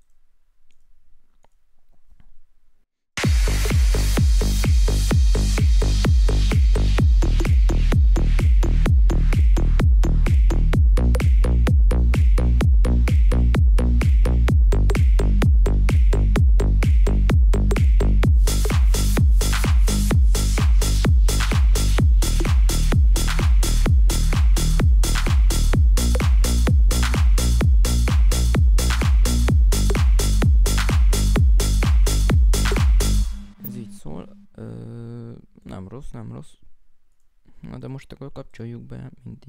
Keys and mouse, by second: 1.4 right click, 12.1 right click, 36.8 right click, 37.7 right click.